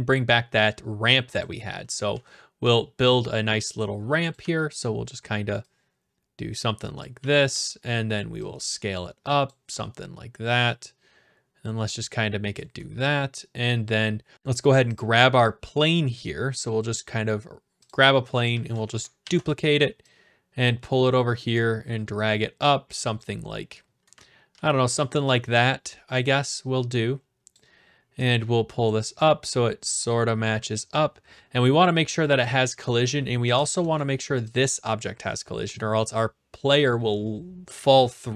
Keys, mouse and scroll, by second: 1.4-2.6 typing, 1.4-2.5 drag, 4.3-5.4 drag, 4.4 e, 7.0-8.1 drag, 7.1-7.5 typing, 9.4-10.6 drag, 9.6 typing, 12.5 click, 12.8-13.7 a, 13.7 right click, 13.8 middle click, 15.0 click, 17.9 click, 18.5 d, 18.8 right click, 19.2 ctrl+d, 21.0-22.2 drag, 23.2-24.2 drag, 24.1-24.5 typing, 25.2 right click, 27.5 click, 28.9 click, 31.8 click, 33.0-33.5 typing, 34.0 right click, 34.6 click.